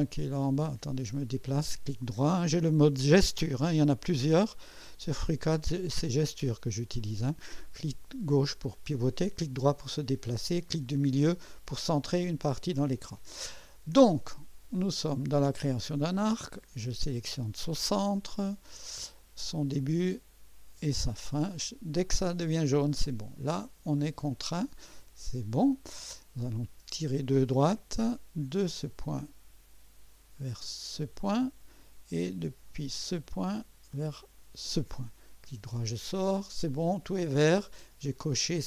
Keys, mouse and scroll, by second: 0.6-1.9 right drag, 4.5 click, 6.7 right click, 17.1 click, 19.4 click, 22.1 click, 24.5 scroll up 1, 25.0 right click, 26.9 click, 28.5 click, 31.0 click, 32.9 click, 34.5 click, 35.5 right click.